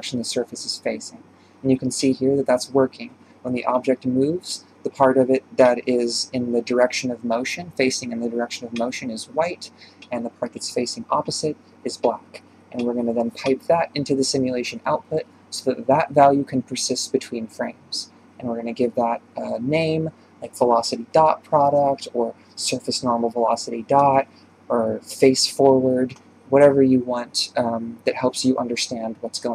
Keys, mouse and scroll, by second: 2.2 scroll down 2, 9.8-11.0 middle drag, 11.0 click, 13.2 ctrl+shift+click, 13.4 ctrl+shift+click, 14.1 click, 14.8-15.2 scroll down 8, 16.1 click, 16.8 scroll down 6, 17.3-20.6 drag, 20.6 BackSpace, 23.7 click, 24.1-25.1 middle drag, 25.1 shift+space, 26.2 shift+Left, 27.5 click, 27.8 click, 28.5 Delete, 29.0-29.5 scroll down 5.